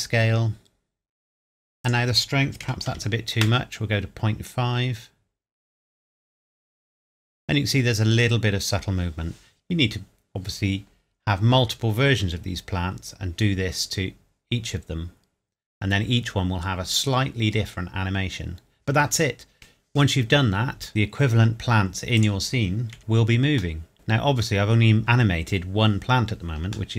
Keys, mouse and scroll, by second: 1.8 click, 2.6 KP_Decimal, 2.9 KP_5, 3.4 KP_Enter, 11.7 scroll down 1, 20.9 scroll up 1, 22.1 click, 22.9 KP_Decimal, 23.1 scroll up 1, 23.3 scroll down 1, 23.4-23.8 scroll up 1, 23.8 middle click, 23.9 space, 24.5 scroll down 1.